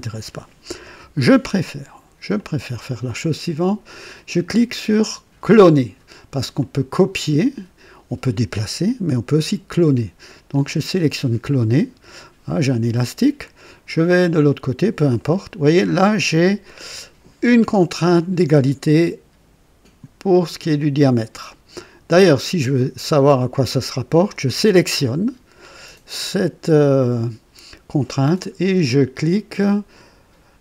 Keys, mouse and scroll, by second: 0.0 click, 0.8 Delete, 2.3 click, 6.5 click, 10.5 click, 14.0 click, 15.1 right click, 15.9 right click, 24.2 click.